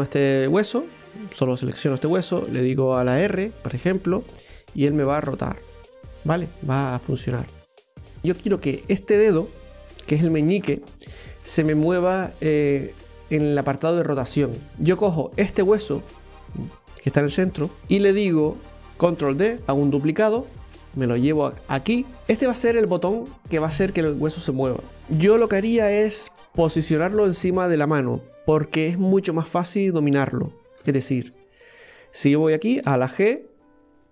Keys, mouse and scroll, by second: 3.3 r, 14.7 right click, 17.8 ctrl+z, 19.3 shift+d, 22.2-23.5 scroll down 3, 23.5-24.9 middle drag, 25.0-26.3 middle drag, 30.8 KP_1, 32.9 g.